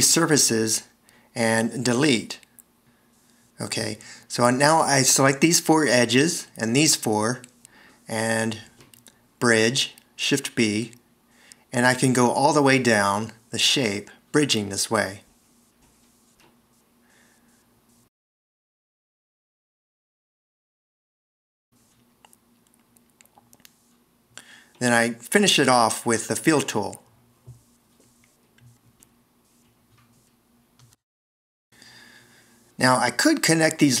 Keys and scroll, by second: 1.1 super+x, 2.9 s, 10.2 shift+b, 24.4 shift+f, 31.6 super+z.